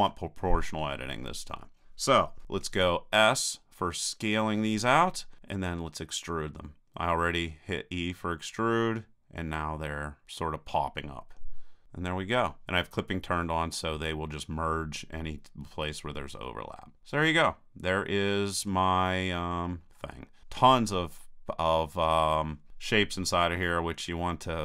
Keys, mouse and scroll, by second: 0.0 o, 4.7 s, 11.8-13.0 drag, 16.4-17.9 middle drag, 19.1-24.6 middle drag.